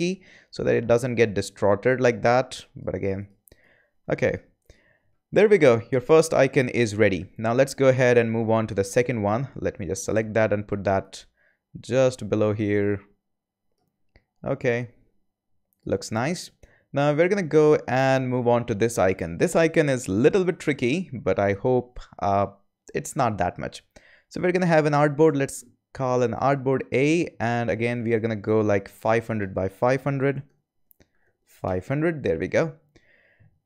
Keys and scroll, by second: 25.2 a, 29.9-31.7 typing.